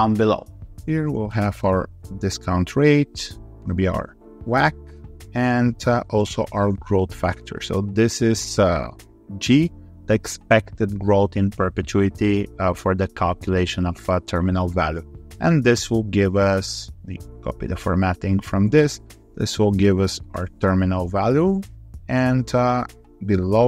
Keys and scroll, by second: 17.4 alt+4.